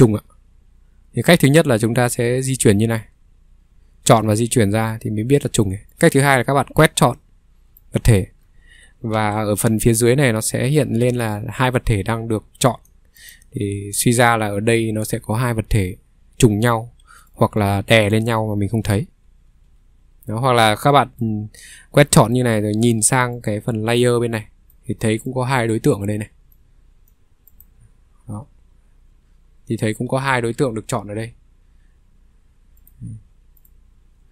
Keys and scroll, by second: 4.5 ctrl+z, 9.1 ctrl+3, 9.3 ctrl+z, 15.7 Escape, 15.8 ctrl+z, 15.8 ctrl+3, 19.5 ctrl+z, 22.9 ctrl+3, 27.6 ctrl+z, 30.2 ctrl+2, 31.0 ctrl+2, 31.7 ctrl+2, 32.1 ctrl+2, 32.5 ctrl+2, 33.1 ctrl+2, 33.4 ctrl+2, 33.7 ctrl+2, 34.1 ctrl+2.